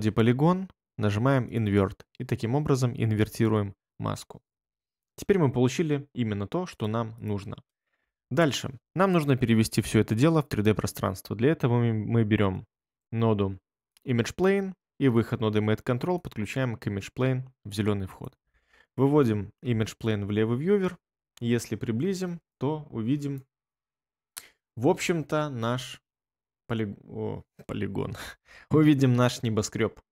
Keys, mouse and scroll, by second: 4.6 ctrl+middle click, 4.8 ctrl+middle click, 19.6 1, 21.2 ctrl+middle click, 21.4 ctrl+middle click, 21.5 ctrl+middle click, 21.7 ctrl+middle click, 23.6 middle click, 23.7 middle click, 24.4 middle click, 24.4 middle click, 24.5 middle click, 25.1 ctrl+middle click, 25.3 ctrl+middle click.